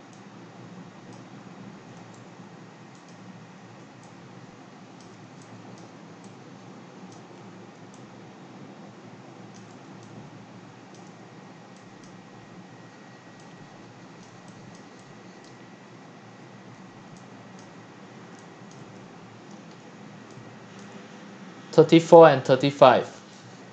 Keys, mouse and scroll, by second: 0.0-0.8 x, 0.8 c, 1.1 drag, 1.4-2.0 middle drag, 2.0 q, 3.1 click, 3.8-15.3 typing, 5.8 click, 7.1 drag, 7.3-7.8 scroll down 3, 9.5 click, 11.0 click, 12.0 click, 14.2 drag, 14.8 click, 15.9-17.0 drag, 17.0 scroll up 1, 17.1 c, 17.6 click, 17.9-18.3 scroll up 1, 18.3 x, 18.7 click, 19.1 scroll up 3, 19.3 click, 20.8 x, 20.8 x, 21.1-22.1 drag, 22.1-22.9 x, 23.4 c.